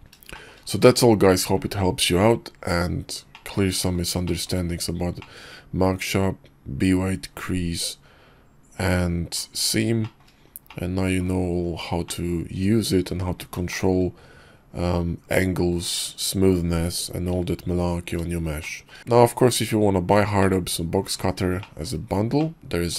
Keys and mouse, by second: 0.3 shift+middle drag, 3.3-3.9 middle drag, 4.2 shift+middle drag, 5.2-9.4 middle drag, 10.0 shift+middle drag, 10.7 middle click, 12.0-13.4 middle drag, 13.7 shift+middle drag, 14.2 KP_5, 14.9 KP_5, 18.6 shift+middle drag, 20.4-20.9 middle drag, 21.6 shift+middle drag, 22.4-22.9 middle drag.